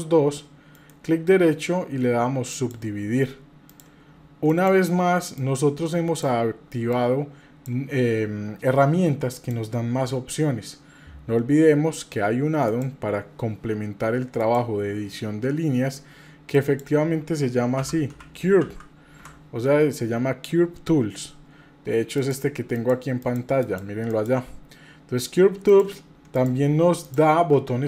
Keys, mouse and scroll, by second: 0.7-2.7 right drag, 3.7 click, 4.5 click, 5.3 click, 7.0 click, 9.3 click, 12.7-14.7 drag, 26.4 click, 27.0 click.